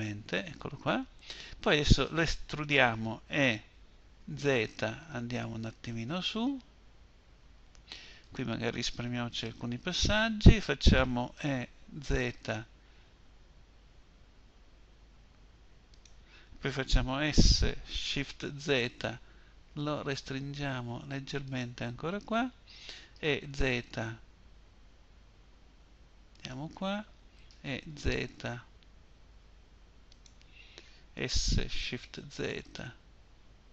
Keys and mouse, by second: 2.7 e, 10.6 e, 16.5 s, 22.4 e, 26.7 e, 30.4 s.